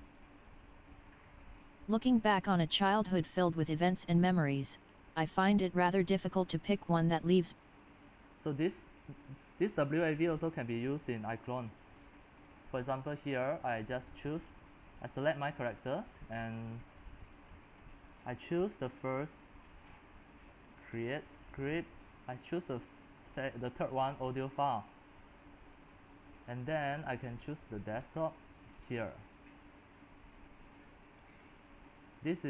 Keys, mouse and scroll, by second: 0.0-18.0 drag, 18.0-21.2 middle drag, 18.0-21.2 scroll, 21.2-32.4 drag.